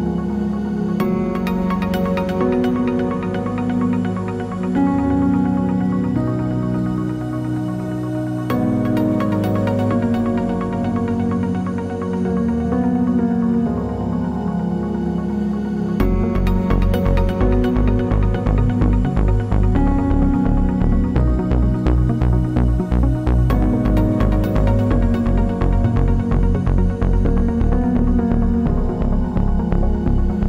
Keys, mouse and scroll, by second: 0.7-7.7 drag, 6.4 KP_Enter, 8.4 click, 9.2-15.8 drag, 9.8 Return, 17.5 shift+a, 18.6 Tab, 23.8 KP_1, 24.4 scroll up 2, 24.6 g, 27.0 KP_0, 27.6 z, 28.0 scroll up 2, 28.2-29.7 shift+middle drag, 28.8 g, 29.7 click, 30.1 g.